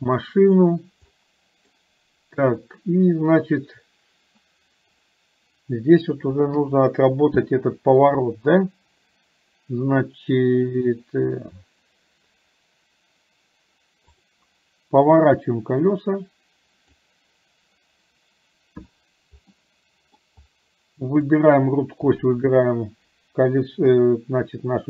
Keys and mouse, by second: 1.3 middle click, 6.6 KP_7, 15.4-17.1 drag, 19.6 middle click, 21.3 click, 22.3 shift+click, 23.9 KP_7.